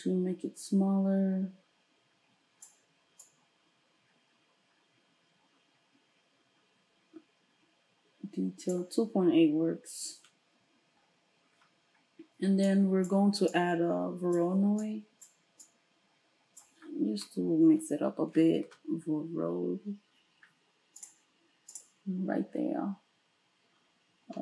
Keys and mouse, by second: 18.7 space, 21.9-24.4 middle drag.